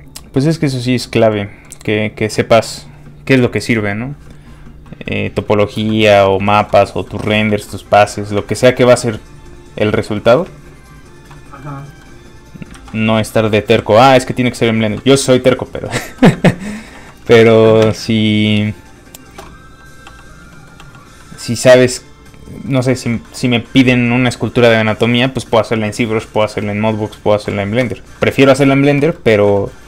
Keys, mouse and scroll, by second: 1.3 middle click, 5.6 middle click, 5.9 shift+middle click, 6.7-7.1 scroll up 2, 7.1 shift+middle click, 8.1 shift+middle click, 8.2 middle click, 8.5 shift+middle click, 8.9 middle click, 9.0 click, 10.2 middle click, 10.6 shift+click, 10.8 shift+click, 11.0 shift+click, 11.3 middle click, 12.5 scroll down 1, 12.7 ctrl+z, 13.7 z, 16.4 shift+middle click, 16.6 middle click, 16.9 f, 17.0 click, 17.7 middle click, 17.8 shift+space, 19.6 space, 19.7 f, 19.8 click, 20.0 f, 20.2 click, 20.5 middle click, 20.8 f, 21.0 click, 21.2 middle click, 21.9 ctrl+click, 23.2 click, 23.3 middle click, 28.1 shift+middle click, 29.1 middle click, 29.2 middle click, 29.6 shift+middle click.